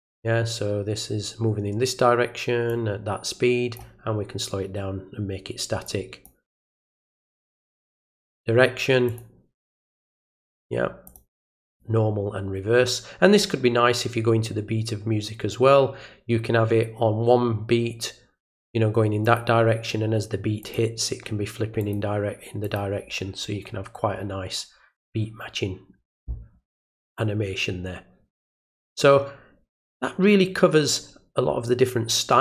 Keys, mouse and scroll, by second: 2.7-3.7 drag, 5.8 click, 8.0 click, 9.0 click, 11.0 click, 11.6 click, 19.2 click, 20.6 click, 21.8 click, 22.6 click.